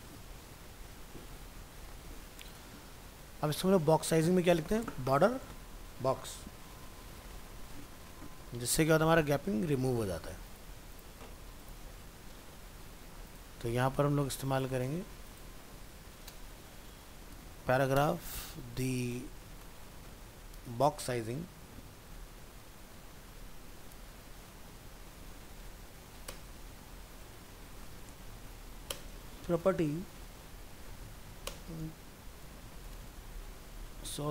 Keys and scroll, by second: 12.0 ctrl+w, 32.6 ctrl+shift+Left.